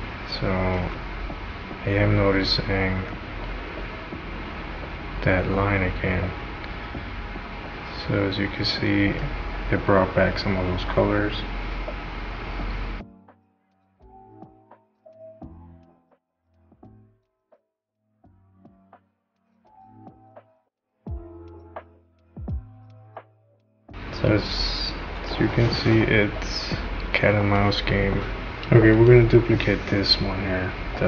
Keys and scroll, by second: 0.8 space, 28.5 Delete.